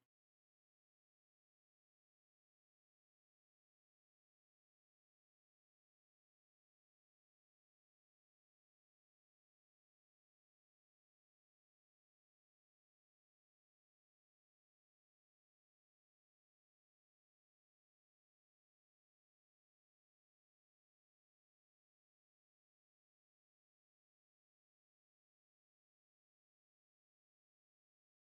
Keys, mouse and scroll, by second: 0.3 middle click, 2.4 click, 3.5 g, 3.6 x, 4.3 click, 5.3 g, 5.4 x, 6.2 click, 6.7 click, 7.2 g, 7.3 x, 8.4 click, 8.8 g, 8.9 x, 11.2 g, 11.3 x, 13.1 click, 13.5 g, 13.6 x, 15.2 click, 15.7 middle click, 16.7 click, 17.0 middle click, 17.7 g, 17.8 x, 18.9 click, 19.5 click, 19.9 g, 20.0 x, 21.0 click, 22.0-23.6 middle drag, 24.0 middle click, 26.0 g, 26.1 x, 26.7 click, 27.3 click, 27.7 g, 27.7 x.